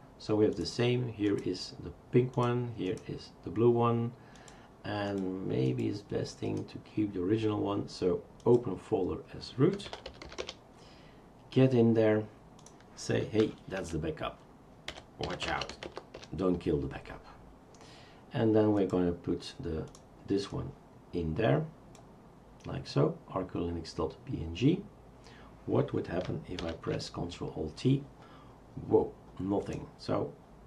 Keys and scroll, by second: 9.5-10.7 typing, 13.4 F2, 13.9 Right, 14.7-16.4 typing, 26.6 ctrl+alt+t.